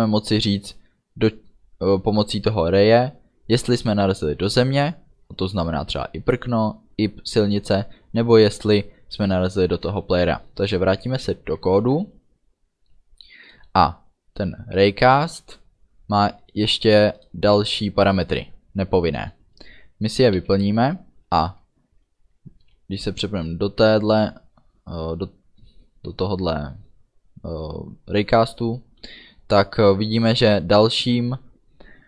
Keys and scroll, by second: 20.6 space, 22.7 Down.